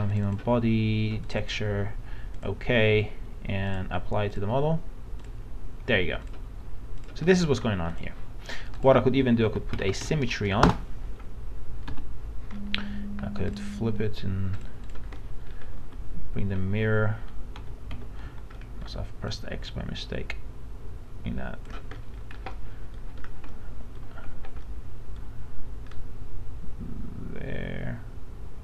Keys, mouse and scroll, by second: 7.4 alt+middle click, 7.9 click, 9.8-10.1 typing, 11.9 f, 12.6 middle click, 13.6 click, 15.2 middle click, 15.4-15.8 scroll up 1, 15.8 w, 17.6 w, 18.2 x, 18.5 middle click, 19.4-21.8 drag, 22.0 middle click, 22.6 middle click, 23.2 scroll down 1, 23.6 middle click, 24.3 scroll up 1, 24.7 middle click, 26.0-27.8 drag, 28.0-28.6 drag.